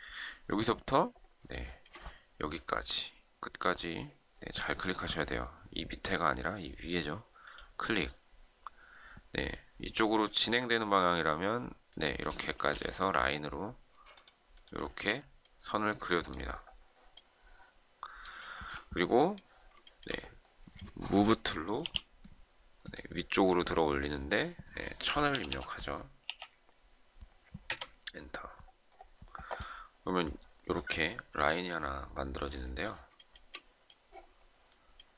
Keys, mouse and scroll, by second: 1.5 shift+middle click, 12.5 space, 14.1 shift+click, 18.3 shift+middle click, 19.8 shift+middle click, 21.7 m, 24.6-26.2 typing, 27.6 Return, 33.1 shift+middle click.